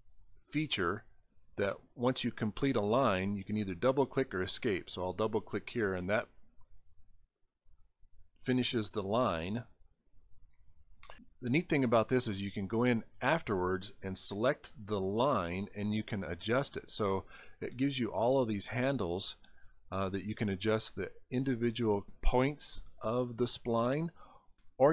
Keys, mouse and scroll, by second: 0.7 click, 4.8 click, 5.0 click, 6.9 click, 7.1 click, 15.3 click, 17.3-19.1 drag, 19.8 scroll up 1, 21.9-23.0 drag.